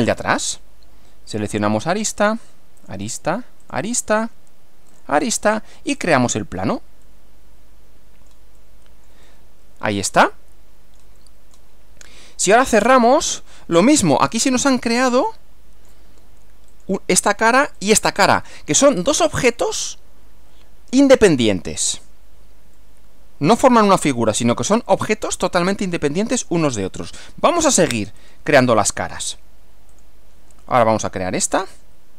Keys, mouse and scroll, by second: 1.4 click, 2.8 ctrl+click, 3.6 ctrl+click, 4.9 ctrl+click, 6.0 click, 7.0-11.7 middle drag, 13.1 click, 15.3 click, 16.7 click, 17.8 click, 19.1-21.1 middle drag, 22.8-24.3 middle drag, 25.3-26.1 middle drag, 28.2 click, 29.9 click, 31.6 click.